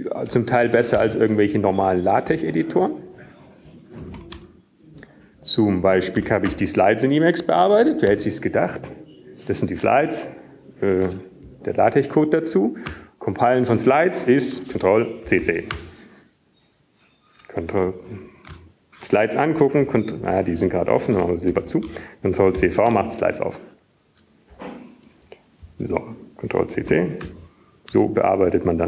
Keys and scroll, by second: 2.8 ctrl+x, 2.8 ctrl+f, 3.8 BackSpace, 5.4 Return, 6.6 q, 9.6 Up, 10.9 Tab, 11.2 Down, 11.4 Down, 11.7 Down, 12.2 Return, 19.3 ctrl+c, 19.8 ctrl+c, 24.7 super+Left, 24.7 super+q, 26.2 super+Right, 26.7 ctrl+c, 26.7 ctrl+v.